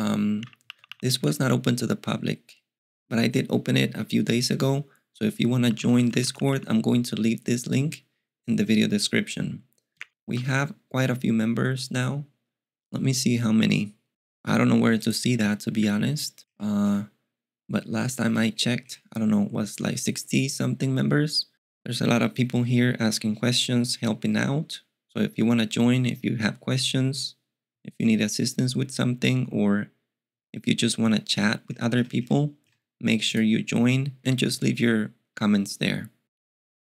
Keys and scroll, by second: 0.0-1.2 typing, 5.4-6.5 typing.